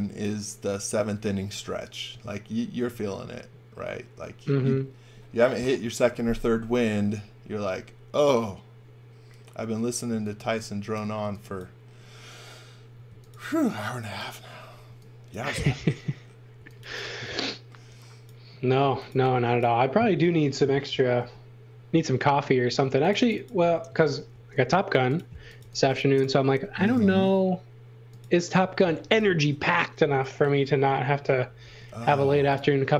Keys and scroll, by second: 10.1 x, 10.4 v, 11.2 x, 12.9 space, 14.7 e, 16.5 x, 16.8 v, 18.8 x, 19.1 v, 21.2 b, 22.7 space, 24.3 shift+w, 25.3-26.4 typing, 29.2 super+z, 30.0 b, 31.6 b.